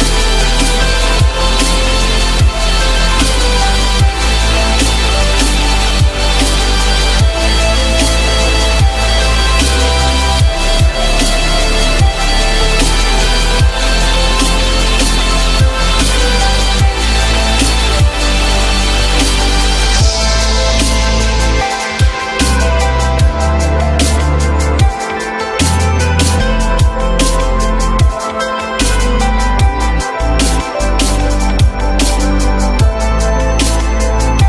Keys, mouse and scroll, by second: 3.9-4.8 typing, 5.8 F4, 7.8 F4, 8.4 F4, 9.8 alt+middle click, 11.2 alt+middle click, 24.6 alt+middle click, 28.7-29.1 typing, 29.3 Return, 32.5 ctrl+z.